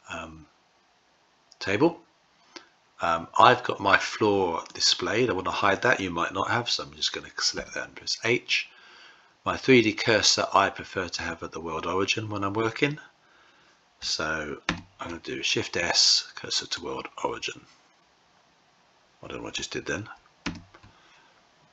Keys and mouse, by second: 4.7 click, 7.5 h, 14.6 shift+s, 20.3 shift+s.